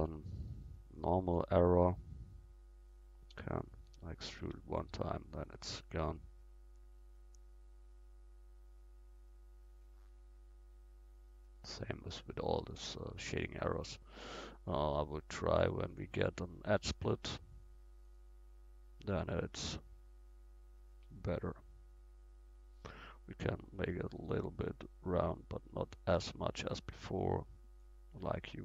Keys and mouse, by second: 1.0-3.3 drag, 1.7-3.3 right drag, 3.3 e, 4.5 Tab, 5.9 middle click, 6.5 middle click, 6.8-13.1 middle drag, 15.9-18.8 drag, 19.5-24.1 middle drag, 24.1 click.